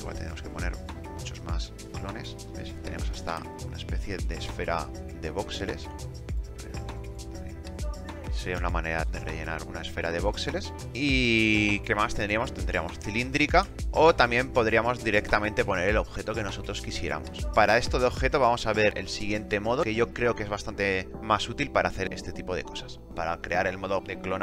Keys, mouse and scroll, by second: 7.0 KP_2, 7.1 KP_0, 7.2 KP_6, 7.3 KP_5, 7.4 KP_Enter.